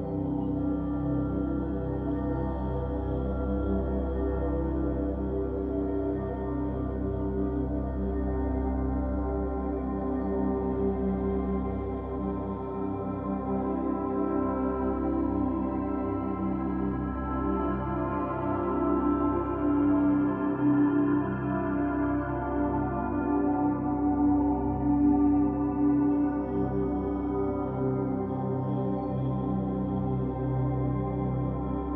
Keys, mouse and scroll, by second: 1.8-4.8 middle drag, 5.2-6.5 scroll down 1, 6.5-8.3 middle drag, 8.3 Tab, 8.9-9.9 middle drag, 9.9-11.8 scroll down 1, 11.8-14.8 drag, 15.1-18.2 middle drag, 18.9 click, 22.3-23.3 drag, 23.3-23.8 scroll up 3, 24.0 scroll down 2, 24.6-27.7 shift+middle drag.